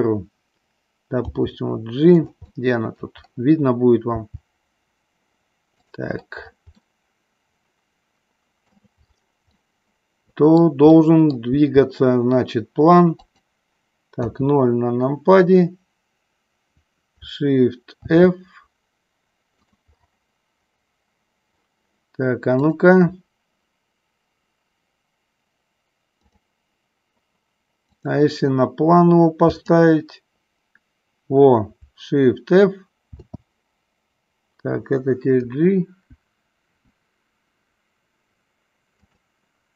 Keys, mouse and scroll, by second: 1.3 g, 2.3 click, 2.5 middle click, 4.3 g, 5.9 click, 6.9-8.8 middle drag, 8.8 scroll down 1, 9.6-10.8 middle drag, 11.0 middle click, 11.4 scroll down 1, 11.5 g, 13.2 click, 14.2 KP_0, 18.1 shift+f, 22.6-26.7 drag, 33.0 shift+f, 35.6 Right, 36.5 Right, 36.9 Right, 37.3 Right, 39.1 click.